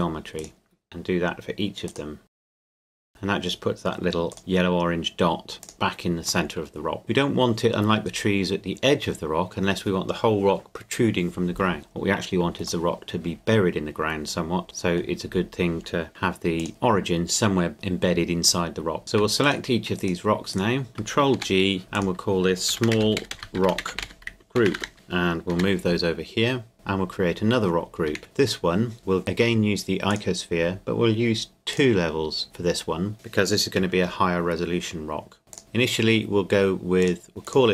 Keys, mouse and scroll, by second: 0.4 right click, 1.9 click, 2.4 right click, 2.5 click, 2.8 right click, 2.9 click, 3.1 right click, 4.3 click, 6.5 middle click, 12.5 middle click, 16.1 g, 16.6 click, 16.7-19.0 middle drag, 19.0 right click, 19.4-21.0 shift+right drag, 21.4 ctrl+g, 22.0 click, 22.7-25.5 typing, 26.7 click, 27.2-28.1 scroll up 1, 28.2 shift+a, 28.2 click, 30.1 click, 32.4-33.7 scroll up 1, 35.5 click.